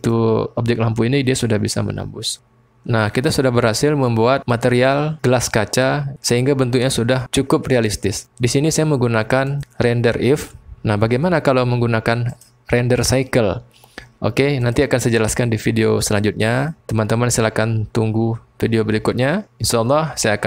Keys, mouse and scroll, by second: 12.3-14.8 drag.